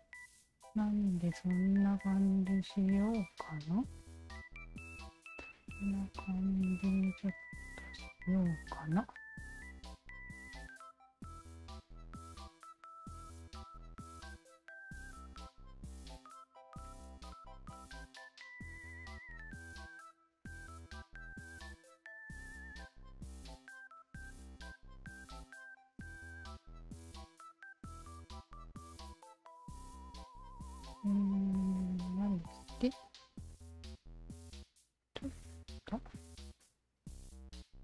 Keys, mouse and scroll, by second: 3.1-4.3 drag, 5.5-8.0 alt+drag, 8.3 alt+click, 9.8 ctrl+z, 10.6 shift+z, 11.6 shift+z, 12.3 shift+z, 13.2 alt+click, 14.4 alt+click, 15.0 Tab, 16.9 Tab, 17.6 q, 19.0 1, 19.5 click, 20.4-23.2 alt+drag, 24.1 alt+click, 27.3 alt+click, 27.4 alt+click, 28.4-31.4 alt+drag, 31.8 alt+click, 33.6 w, 34.7 alt+shift+click, 35.9 alt+click, 36.4-37.8 alt+drag.